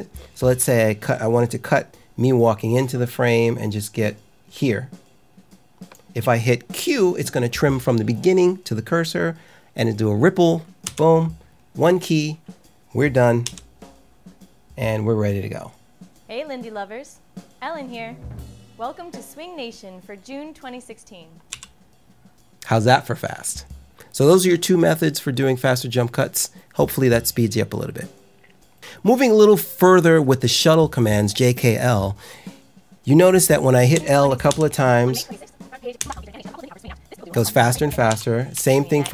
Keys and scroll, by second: 10.8 q, 13.4 l, 21.4 k, 35.0 l, 35.9 l, 38.0 k, 38.5 j.